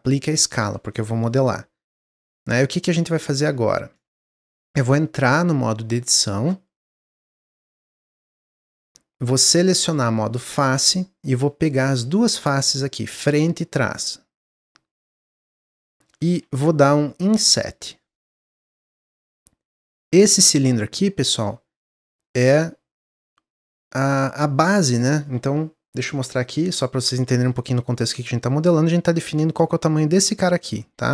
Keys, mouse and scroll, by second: 2.6 click, 3.0 Tab, 3.5 Tab, 3.7 click, 3.9 Tab, 5.0-8.8 middle drag, 8.8 click, 10.9 middle click, 11.8 shift+click, 12.3-15.3 middle drag, 17.2 i, 23.8-27.0 middle drag.